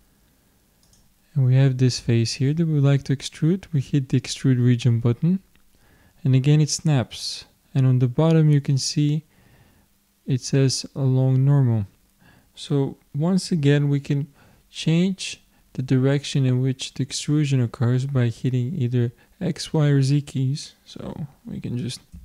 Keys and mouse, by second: 0.8-2.7 drag, 4.2-6.0 drag.